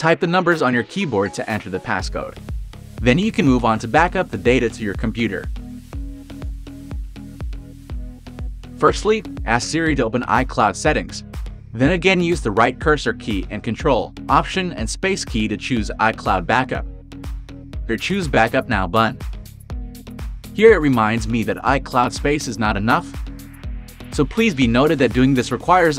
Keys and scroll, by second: 10.0 Right, 11.0 Right, 12.0 Right, 12.8 Right, 15.0 ctrl+alt+space, 17.3 Right, 17.7 ctrl+alt+space.